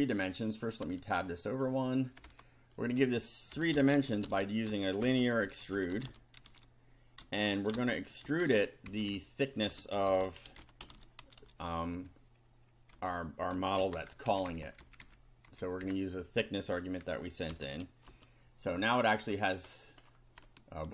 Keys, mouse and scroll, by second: 0.8 Tab, 1.5 click, 2.2 Return, 3.3-8.4 typing, 8.9 shift+Left, 9.7-11.7 typing, 12.9 End, 13.8 shift+[, 14.3 shift+Down, 15.5 shift+End, 15.8 shift+Return, 17.5 shift+], 18.1 shift+F5, 19.0-20.2 scroll down 8, 20.6 shift+middle click.